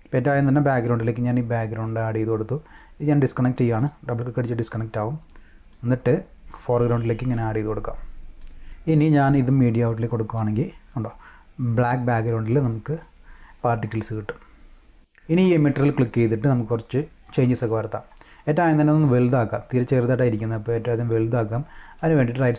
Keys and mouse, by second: 0.4-1.6 drag, 3.5 click, 3.7 click, 5.7-7.3 drag, 8.9-10.4 drag, 16.0 click.